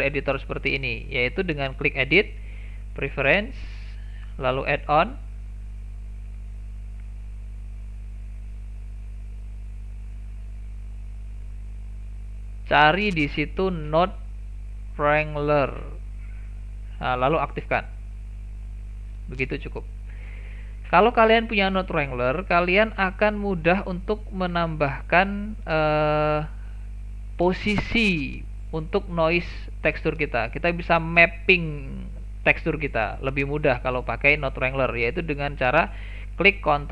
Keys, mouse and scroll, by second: 1.7-21.9 drag, 24.0 click, 24.6 click, 28.8-36.9 drag.